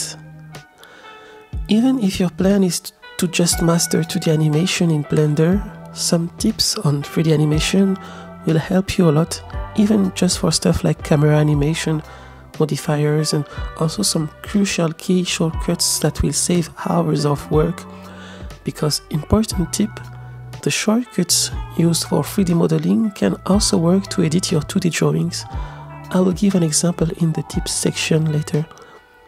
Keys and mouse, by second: 0.2 click, 0.2 right click, 0.8-2.1 middle drag, 2.5 KP_0, 4.1-5.1 drag, 9.5-9.8 shift+middle drag, 10.8 click, 12.7 click, 13.9 click, 15.1 g, 16.7 click, 17.7 g, 21.0 click, 21.2-23.9 drag, 22.1 g, 24.1 click, 24.4 Escape, 24.4 click, 25.8-29.2 drag.